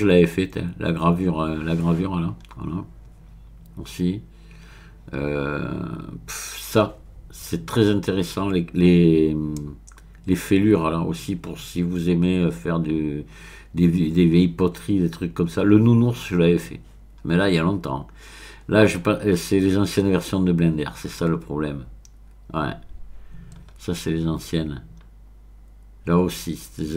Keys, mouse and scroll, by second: 2.6-3.5 scroll down 3, 4.9-6.4 scroll down 4, 6.4-7.4 scroll up 1, 7.9-9.1 scroll up 3, 12.4-13.5 scroll down 1, 14.4-15.8 scroll down 2, 22.5-23.6 scroll down 2, 23.6-25.3 scroll up 6.